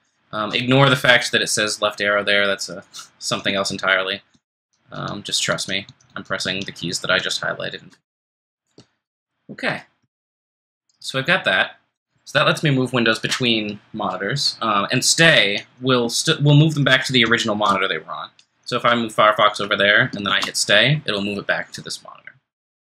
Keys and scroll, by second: 0.0 ctrl+shift+Left, 4.3 ctrl+shift+Right, 4.6 ctrl+shift+Right, 4.9 ctrl+shift+Right, 5.5 ctrl+shift+Right, 6.1 ctrl+shift+Right, 6.4 ctrl+shift+Right, 7.0 ctrl+shift+Left, 16.4 shift+Escape, 17.2 ctrl+shift+Left, 20.2 ctrl+shift+Return.